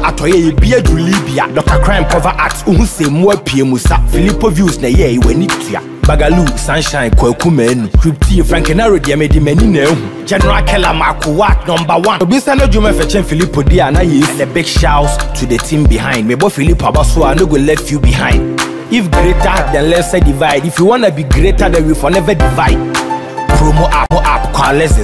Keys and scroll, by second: 9.9 ctrl+t, 24.4 Return.